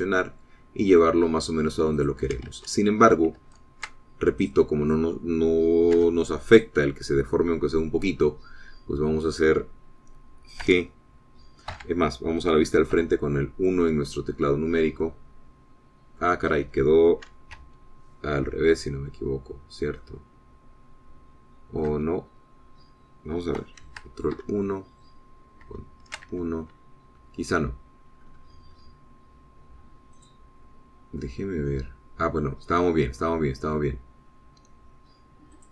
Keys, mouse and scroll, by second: 3.0 click, 3.6 ctrl+z, 4.5 ctrl+z, 5.5 click, 7.1 2, 7.6 click, 11.7 g, 12.8 Escape, 14.0 KP_1, 15.4-16.0 scroll down 4, 16.1-17.4 middle drag, 17.6 scroll up 2, 18.6 KP_1, 19.9-20.5 scroll down 2, 20.6 scroll down 2, 21.1-23.0 drag, 23.0 middle click, 23.0 KP_1, 25.4 ctrl+KP_1, 26.8 ctrl+KP_1, 29.1-30.4 scroll up 4, 31.3 click, 32.3-34.5 middle drag, 34.9-35.2 scroll down 2.